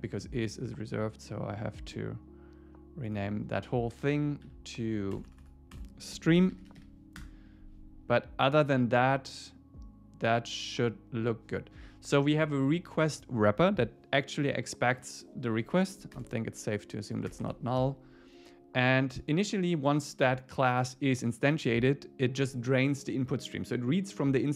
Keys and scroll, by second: 4.5 Right, 7.2 Return.